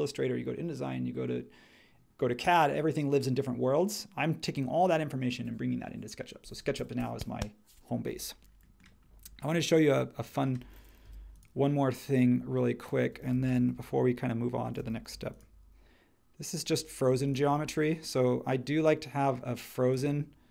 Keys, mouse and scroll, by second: 11.0 n, 15.1 m, 17.1 space.